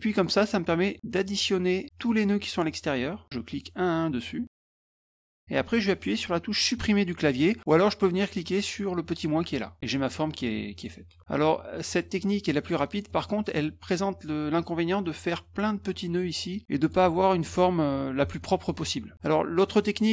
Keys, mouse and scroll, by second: 0.1 shift+click, 1.2 shift+click, 1.9 click, 3.5 click, 4.9 shift+click, 9.4 click, 10.7 click, 11.8 middle click, 12.5 middle click, 13.1 middle click, 13.1 scroll up 2, 15.0 click, 16.8 click, 19.1 middle click, 19.7 middle click.